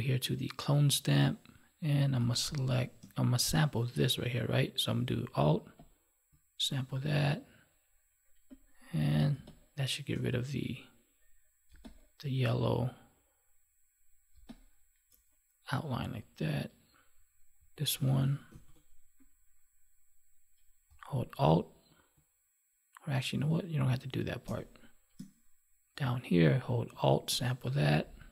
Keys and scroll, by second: 2.1 space, 9.2 space, 11.6 space, 14.3 space, 18.4 ctrl+z, 24.3 space.